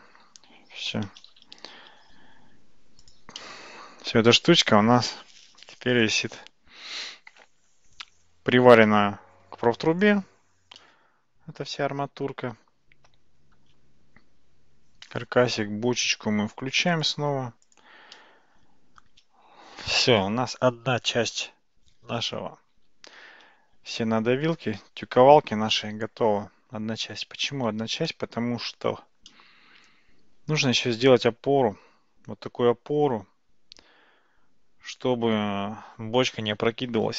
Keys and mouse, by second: 0.7 Tab, 1.5 shift+z, 2.1 alt+z, 3.1 click, 3.4-8.8 middle drag, 10.8-13.6 middle drag, 16.9 click, 18.2-24.1 middle drag, 24.7 ctrl+s, 28.1-28.9 shift+middle drag, 29.3-30.8 middle drag.